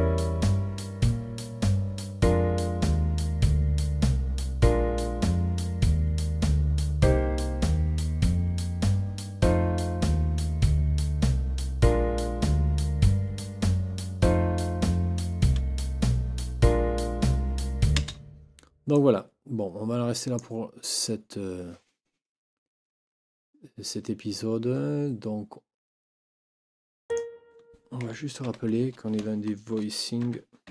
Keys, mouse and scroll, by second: 17.9 space, 18.9-20.5 drag, 27.1 click, 28.5 ctrl+t, 30.3 Caps_Lock, 30.5-30.7 typing.